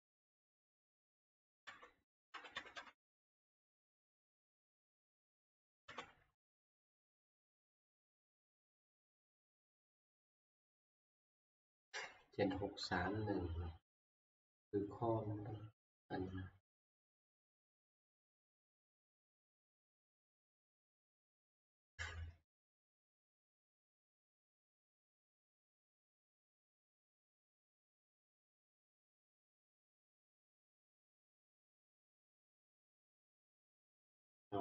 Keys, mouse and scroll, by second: 1.4 ctrl+Page_Down, 1.8 ctrl+Page_Down, 2.3 ctrl+Page_Up, 2.5 ctrl+Page_Up, 2.8 ctrl+Page_Up, 3.0 ctrl+Page_Up, 4.0 Page_Down, 5.8 ctrl+Page_Up, 8.1 click, 10.1 click, 10.7 click, 10.9 click.